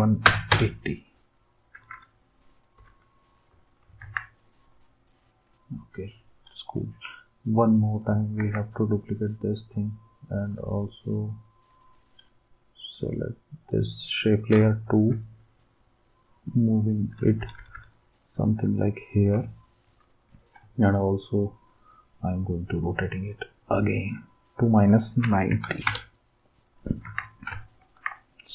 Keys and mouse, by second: 0.0-0.7 typing, 1.8 Up, 1.9 Up, 2.8 Left, 4.0 ctrl+s, 8.4 ctrl+d, 15.1-17.3 Up, 17.6 Up, 17.7 Up, 25.0-26.2 typing, 27.0 ctrl+s.